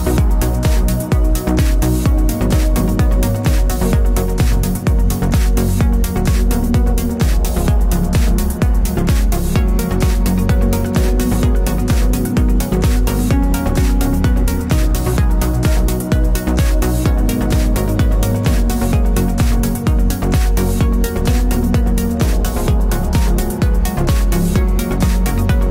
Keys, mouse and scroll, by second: 0.8-3.0 typing, 2.6 Tab, 4.0 KP_Enter, 6.4 click, 8.7 KP_5, 9.2 KP_Enter, 10.9 click, 11.4 t, 12.0 click, 13.8-20.3 typing, 20.3 Return, 21.6 click, 22.5-23.7 typing, 24.9 click.